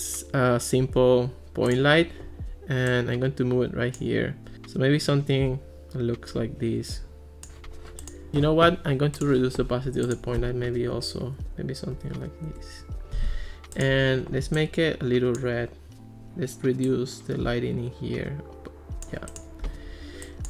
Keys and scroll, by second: 10.8 ·, 12.5 Return.